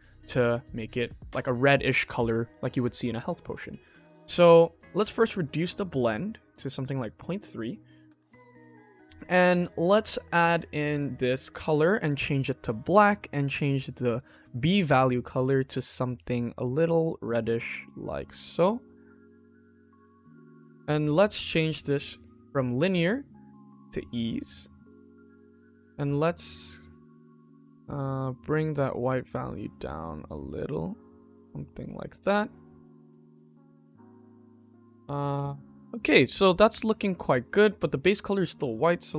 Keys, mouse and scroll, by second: 0.3-0.6 shift+middle drag, 1.1 shift+middle click, 3.4 click, 4.4 shift+middle click, 5.0 click, 5.3 click, 5.9 click, 7.0 click, 10.2 click, 13.2 click, 18.0 click, 18.5 shift+middle click, 19.0-19.7 scroll up 2, 19.7-20.0 scroll down 2, 20.0 scroll up 2, 20.5-20.8 shift+middle drag, 21.5-23.9 drag, 24.8-25.3 middle drag, 26.1 click, 28.2-31.7 drag, 32.1 click, 32.5-33.0 middle drag, 33.3-33.9 scroll down 2, 33.9 middle click, 35.3 ctrl+s, 36.2 middle click, 36.5 middle click, 36.8-37.5 scroll up 1, 37.5 middle click, 38.2 click.